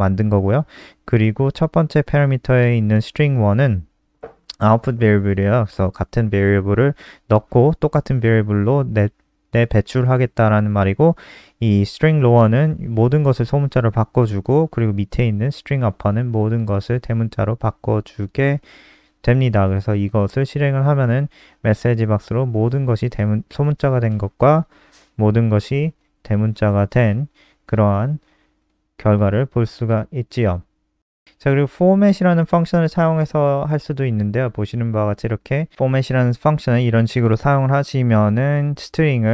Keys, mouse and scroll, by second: 22.2 ctrl+s, 22.6 F5, 27.4 Return, 29.9 click, 30.9 ctrl+c, 30.9 click, 32.6 Delete, 32.7 ctrl+v, 33.5 click.